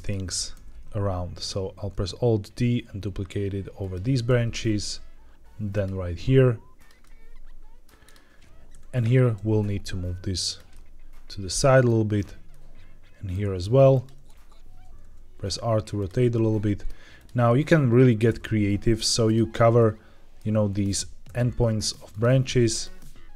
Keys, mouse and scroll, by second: 1.1 alt+d, 3.7 click, 4.8 alt+d, 5.6 click, 5.9 r, 6.7 click, 6.9-7.8 middle drag, 7.9 click, 8.6 KP_7, 9.3 g, 10.4 click, 10.6-11.8 middle drag, 12.1 click, 12.4-13.2 middle drag, 13.4 g, 13.8 click, 14.1 t, 14.6 t, 14.9 r, 15.9 click, 16.1-16.8 middle drag, 17.1 click, 17.4 middle drag, 18.2 r, 19.2 click, 19.7-20.3 middle drag, 21.2 r, 22.0 click, 22.2 g, 22.6 click, 22.9 middle click.